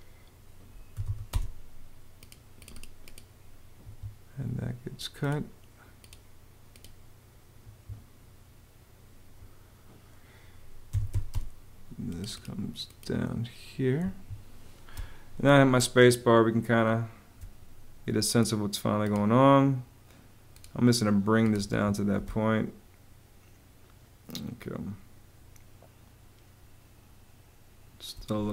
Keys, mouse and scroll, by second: 0.4-1.3 typing, 3.6 Escape, 7.4 Escape, 10.4-11.3 typing, 13.8 Escape, 14.7 space, 21.4 Escape, 22.0 space.